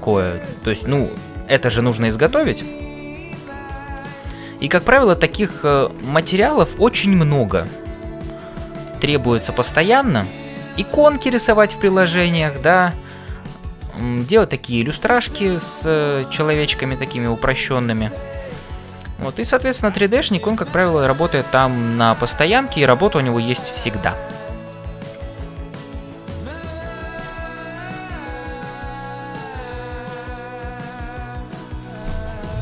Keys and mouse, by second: 3.1 middle click, 6.1 middle click, 7.1 f, 8.5 f, 9.1 middle click, 10.8 middle click, 11.2 g, 12.1 middle click, 13.5 g, 14.4 middle click, 15.5 click, 16.0 middle click, 17.5-18.5 middle drag, 19.0 middle click, 19.4 middle click, 19.5 click, 21.3 middle click, 24.3 middle click, 25.4 click, 27.2 f, 27.6 middle click, 28.1 click, 28.8 g, 29.7 click, 30.3 middle click, 30.8 g.